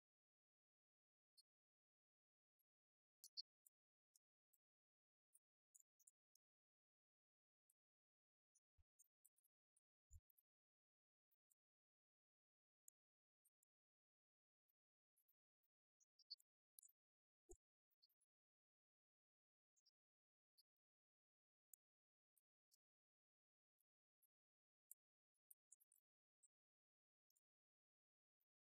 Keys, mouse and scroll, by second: 22.3 right click, 23.6 KP_0, 24.9 KP_0.